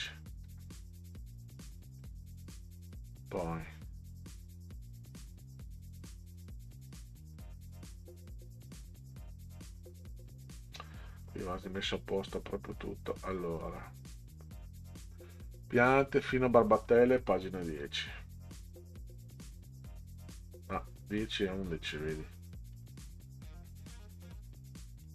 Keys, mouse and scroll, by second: 0.4 scroll up 2, 2.0 click, 10.4-10.8 scroll down 6, 11.5 middle click, 15.0 click, 17.8 click, 21.7 scroll up 2, 22.7 click, 25.0 click.